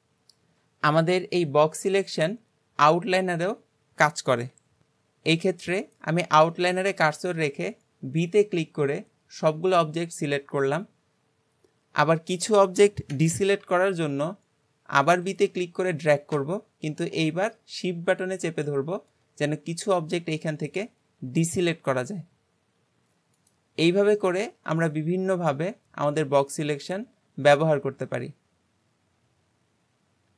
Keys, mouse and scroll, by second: 0.0 click, 24.2-27.2 middle drag.